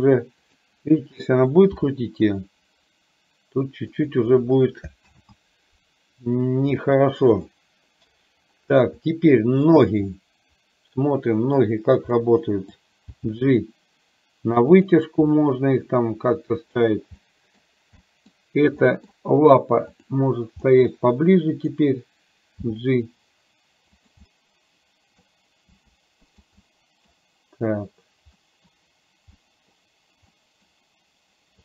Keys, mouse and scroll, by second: 0.6 click, 1.8 r, 5.2 ctrl+z, 6.8 middle click, 9.8 click, 10.2-11.7 middle drag, 12.3 middle click, 13.2 g, 15.5-16.8 middle drag, 17.3 middle click, 18.1 middle drag, 19.0 middle click, 20.7-21.8 middle drag, 22.7 g, 24.3-25.3 middle drag, 26.7 middle click, 28.5 middle click, 29.6 middle click, 30.5 middle click.